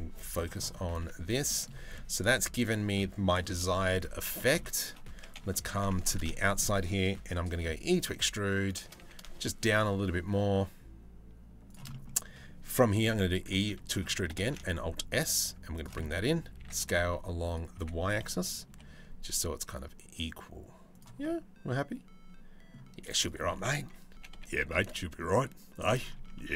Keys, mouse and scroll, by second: 0.0-1.1 middle drag, 1.6-2.8 middle drag, 3.3 middle click, 4.0 middle click, 4.5 click, 4.8 Tab, 5.2 2, 5.7 alt+click, 6.1 shift+middle click, 7.2 e, 11.5 middle click, 12.7 e, 13.3 middle click, 14.1 alt+s, 15.6 middle click, 16.2 s, 17.4 s, 20.8-22.4 middle drag, 23.8 g, 25.8 Tab, 26.0-26.3 middle drag.